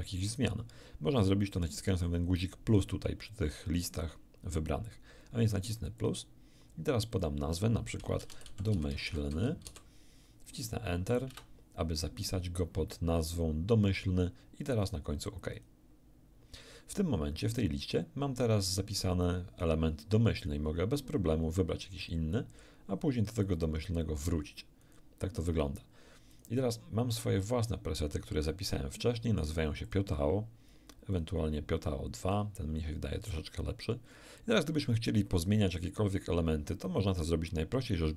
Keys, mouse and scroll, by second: 6.0 click, 7.1 click, 8.2-9.7 typing, 11.3 Return, 15.5 click, 20.4 click, 22.0 click, 23.4 click, 24.8 click, 26.3 click, 29.9 click, 31.1 click, 32.2 click.